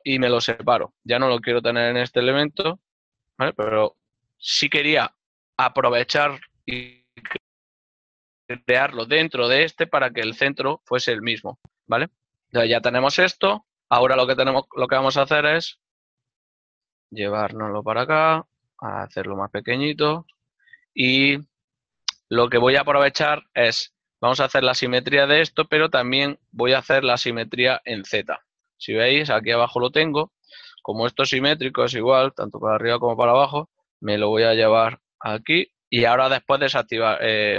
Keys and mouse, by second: 1.7 p, 1.9 Tab, 2.1 right click, 3.1 g, 3.5 right click, 5.8 Tab, 9.1 shift+middle click, 13.0 Tab, 14.1 ctrl+middle click, 16.7 click, 17.8 z, 18.1 click, 19.2 s, 19.3 click, 19.6 ctrl+middle click, 22.5 ctrl+middle click, 28.7 ctrl+middle click, 33.5 shift+middle click, 35.4-36.1 typing, 35.9 click.